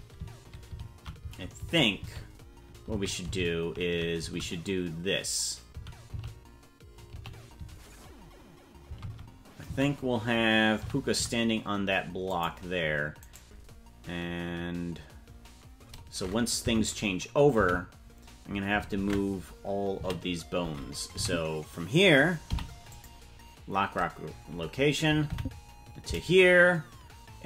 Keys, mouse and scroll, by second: 13.3 right click, 16.7 Left, 17.6 Right, 19.0 ctrl+Tab, 20.0 a, 21.2 Left, 22.5 i, 25.3 Right.